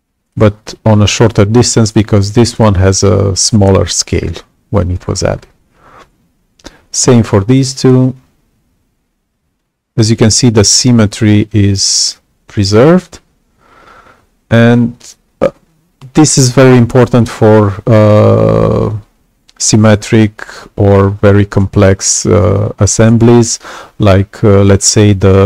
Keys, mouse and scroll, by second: 7.5-14.6 alt+drag.